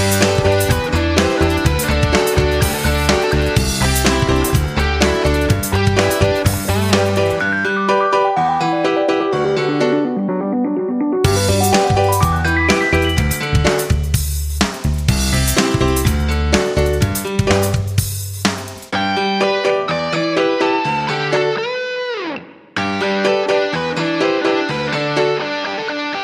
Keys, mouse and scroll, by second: 3.0 F9, 7.6 F5.